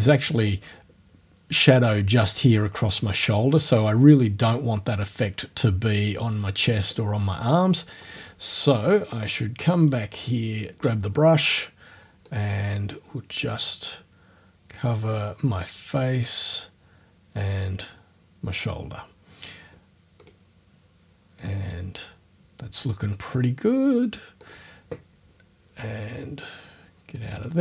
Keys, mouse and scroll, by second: 8.0 click, 9.3 click, 10.7 click, 12.3-18.7 drag, 20.2 click, 24.5 click, 27.2 click.